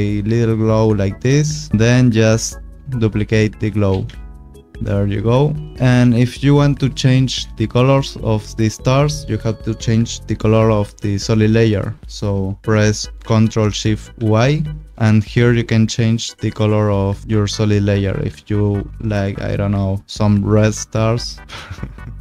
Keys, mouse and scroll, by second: 1.7 click, 1.7 scroll, 3.9 ctrl+d, 4.7-5.2 scroll, 5.2 click, 8.9 click, 14.1 ctrl+shift+y, 15.0 click, 16.5 click, 17.2 click.